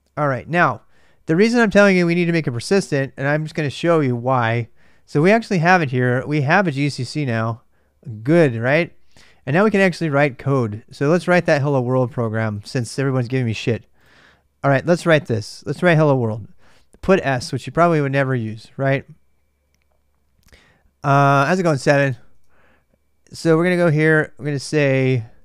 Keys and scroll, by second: 5.0-8.8 typing, 11.1 super+Tab, 11.1 typing, 11.9 super+Tab, 14.0 super+Tab, 14.0 typing.